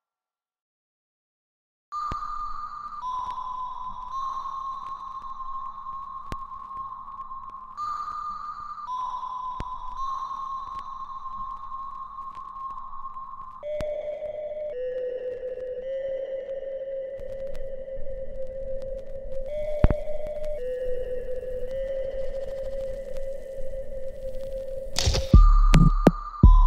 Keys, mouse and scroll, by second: 2.3-5.0 shift+right drag, 5.0-6.4 alt+right drag, 6.4 click, 7.5 alt+click, 8.8 alt+right click, 9.3-11.3 alt+drag, 11.3-17.0 alt+drag, 17.6-21.0 alt+drag, 21.0 alt+right click, 21.4 alt+click, 22.2 alt+right click, 22.6-24.5 alt+drag, 25.0 alt+middle click, 25.4 alt+right click, 25.7-26.6 alt+drag.